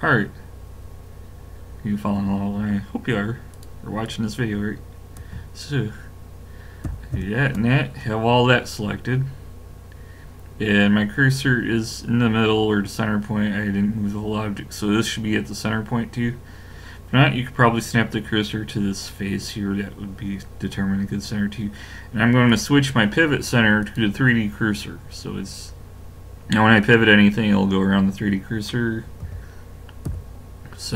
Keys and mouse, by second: 3.5 click, 6.9 ctrl+KP_Add, 7.1 ctrl+KP_Add, 22.5 click, 24.0 click, 24.7-29.2 middle drag, 29.2 KP_7, 30.1 KP_5.